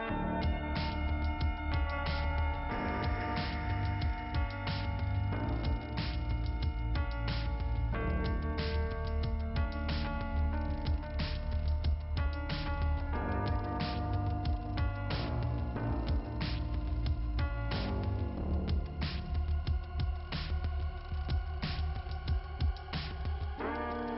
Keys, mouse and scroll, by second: 0.6 click, 0.7 click, 1.3 click, 5.6 click, 7.1 click, 8.9 click, 12.1 click, 12.3 click, 13.1 click, 13.4 click, 13.5 double click, 14.1 BackSpace, 14.3 double click, 14.4 BackSpace, 15.7 BackSpace, 16.1 l, 16.6 l, 16.9 Return, 17.8 Return, 22.0 click.